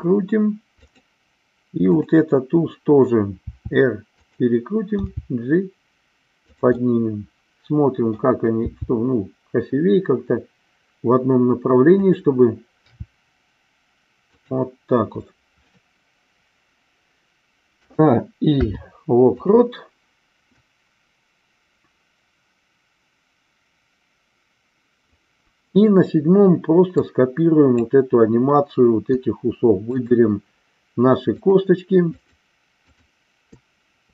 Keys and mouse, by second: 0.9 click, 1.8-3.0 drag, 3.4 r, 4.3 click, 4.9 g, 6.5 click, 6.8-8.1 middle drag, 8.6 g, 12.9 r, 14.3 click, 17.6 a, 18.5 i, 20.6-25.1 drag, 27.0 click, 29.8-30.9 shift+drag, 31.4 shift+click.